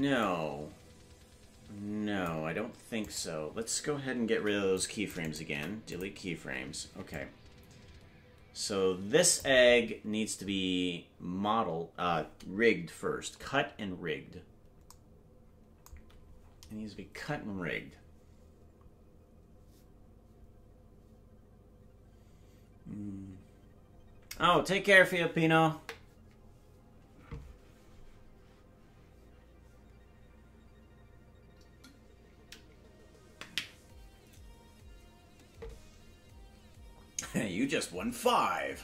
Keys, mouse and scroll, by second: 0.2 click, 3.0-4.3 right drag, 4.3 c, 5.4 Delete, 7.1-9.4 drag.